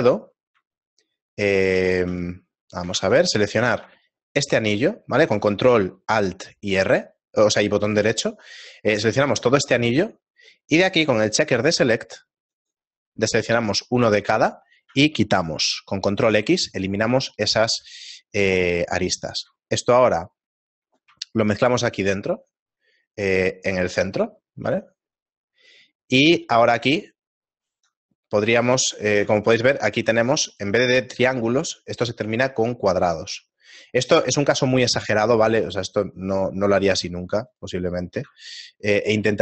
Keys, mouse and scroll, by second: 0.1 middle click, 0.1-1.6 scroll down 1, 2.1 a, 4.5 ctrl+Tab, 4.5 ctrl+alt+right click, 9.8 middle click, 13.3 click, 18.0 ctrl+x, 18.5 ctrl+Tab, 20.3 alt+right click, 21.5 alt+m, 25.4 middle click, 25.4 a, 28.5 alt+right click, 28.5 a, 28.9 right click, 29.2 a, 29.9 ctrl+Tab, 30.8 right click, 31.4 shift+middle click, 34.6 shift+middle click, 34.6-38.6 scroll down 2, 34.6 a, 39.3 ctrl+Tab.